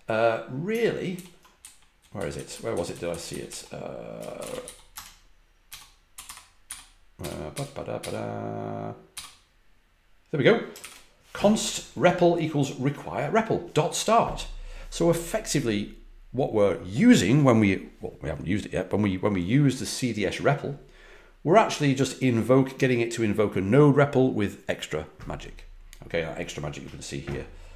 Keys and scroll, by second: 1.1 ctrl+f, 1.6-1.9 typing, 3.9-7.9 typing, 9.1 typing, 10.7 shift+v.